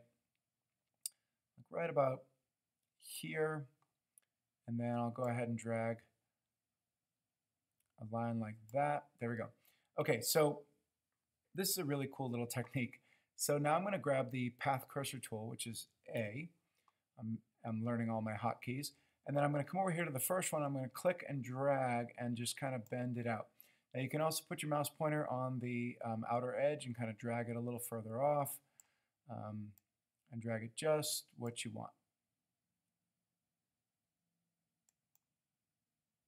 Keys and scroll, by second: 16.4 a.